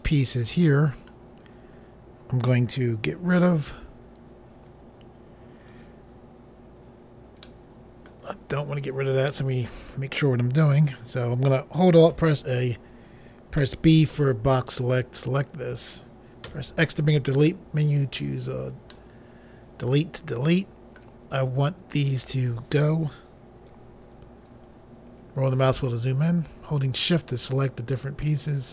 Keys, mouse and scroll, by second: 1.5-2.4 scroll down 1, 3.1 b, 4.2 click, 7.4 middle click, 8.8 click, 9.3 middle click, 12.1 alt+a, 13.7 b, 14.7 click, 16.5 x, 18.2 click, 18.9 middle click, 21.9 click, 24.7-25.9 scroll up 2, 26.1 shift+click, 26.9 shift+click, 28.6 shift+click.